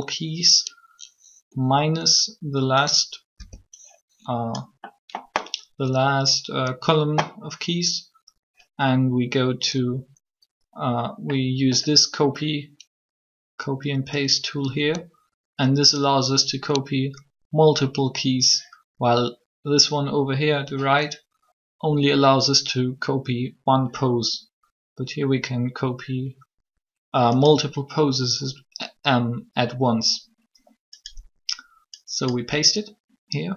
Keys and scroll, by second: 3.3 b.